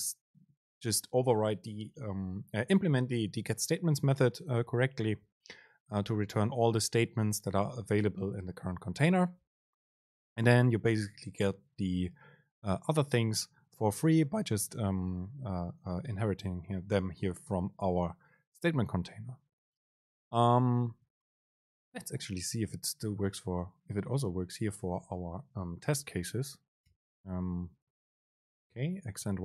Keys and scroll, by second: 25.0 Down, 26.1 End, 27.0 Return, 27.8 super+space.